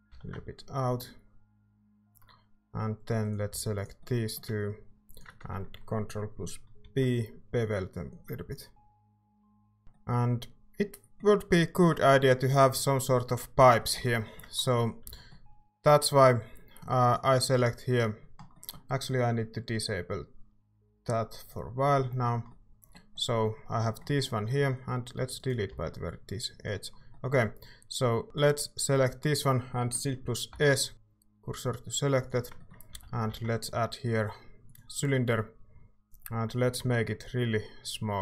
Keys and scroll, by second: 0.1 e, 3.6 a, 6.8 ctrl+b, 15.0 a, 25.7 x, 30.5 s, 30.9 s, 32.9 a.